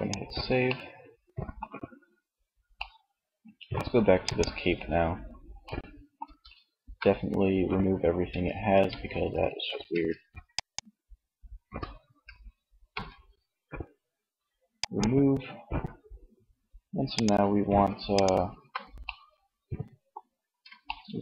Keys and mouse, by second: 3.7-5.2 middle drag, 6.3 a, 7.5 Tab, 8.2 a, 9.0 Tab, 9.8-10.8 right drag, 10.8 Tab, 11.9 a, 13.8-15.7 drag, 16.1 right click.